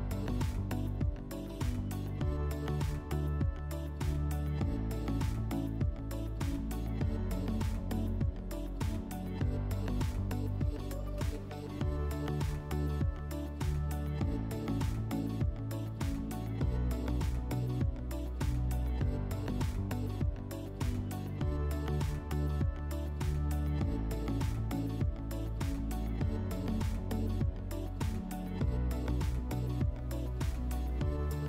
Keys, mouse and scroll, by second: 2.0 click, 5.3 click, 7.3 click, 8.0 click, 10.1 click, 12.1 alt+scroll, 12.8 F4, 18.5 alt+middle click, 22.9 alt+w, 24.1 r, 27.2 click, 28.2 alt+w, 28.9 w, 30.3 click.